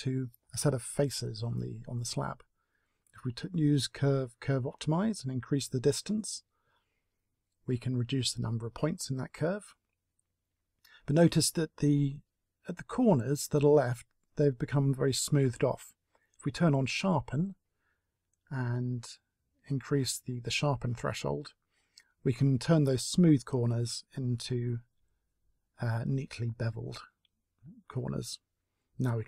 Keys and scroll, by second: 28.0 a.